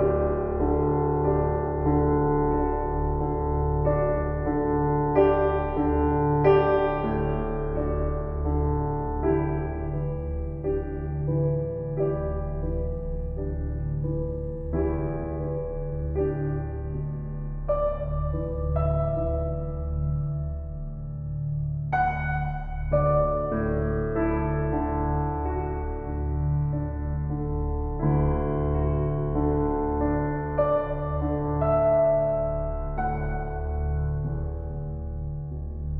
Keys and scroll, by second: 4.7 shift+s, 8.0 s, 11.2 shift+s, 14.0 shift+s.